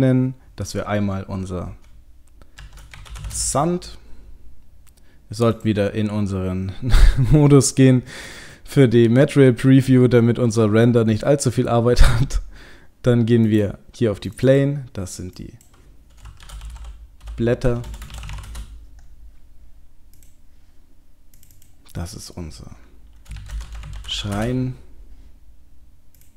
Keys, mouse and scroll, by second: 5.7 click, 13.4 click, 18.1 BackSpace, 20.2 click, 23.4 click, 26.2-26.3 click.